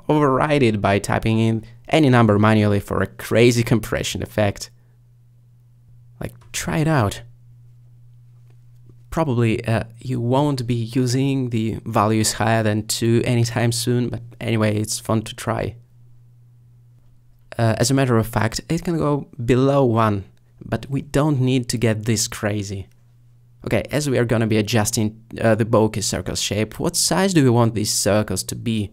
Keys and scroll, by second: 1.3 1, 4.1 3, 10.6 5, 14.5 typing, 20.8 2, 25.0 1.